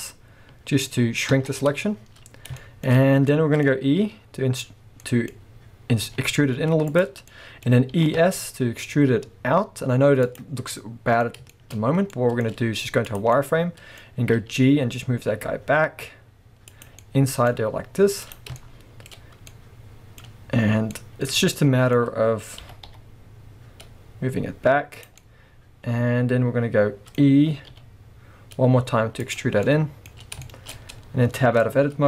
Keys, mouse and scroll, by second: 2.2-2.6 scroll up 2, 2.9-3.3 scroll up 2, 4.0 w, 5.0-5.4 scroll down 2, 5.4-6.0 scroll up 2, 6.0 e, 7.0 click, 7.3-10.4 middle drag, 7.9 e, 10.4 click, 10.5 scroll down 1, 10.7-14.6 middle drag, 11.3-11.9 scroll up 2, 12.5 z, 14.3 g, 16.8 click, 17.0-22.6 middle drag, 17.6 z, 22.6 g, 25.0 click, 25.2-29.3 middle drag, 27.7 e, 29.3 click, 29.4 scroll down 2, 29.7-32.0 middle drag, 30.2 scroll up 2, 30.9-31.4 scroll up 2, 31.4 Tab.